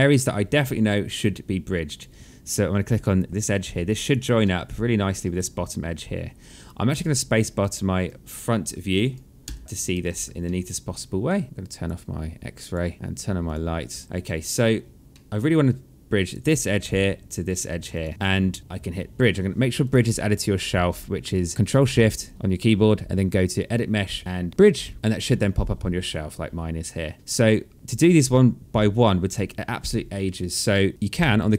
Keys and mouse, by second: 0.1 alt+click, 2.4 click, 4.0 alt+middle click, 6.5 space, 9.0 f, 9.6 space, 10.0 alt+middle click, 11.4 click, 13.0 click, 15.4 alt+middle click, 15.8 click, 17.5 shift+click, 19.4 click, 21.0 ctrl+shift+click, 27.7 click, 28.8 shift+click, 30.7 click.